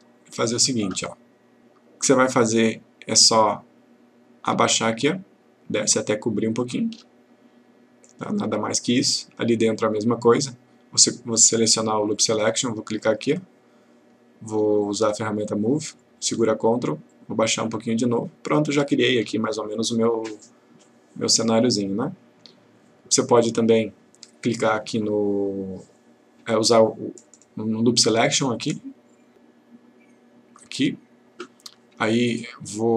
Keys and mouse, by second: 4.7-7.2 ctrl+click, 17.1-19.3 ctrl+click, 28.3 click, 30.8 click.